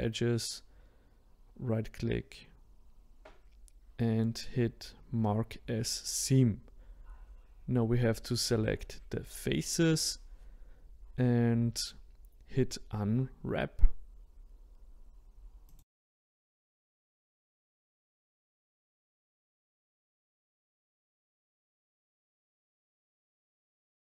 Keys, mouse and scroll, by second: 6.3-9.5 middle drag, 10.8-14.3 middle drag, 16.5 middle click, 17.1 click, 17.3 a, 18.9 click, 19.6 click, 19.7 shift+click, 21.6 click, 22.6 g, 23.4 shift+click.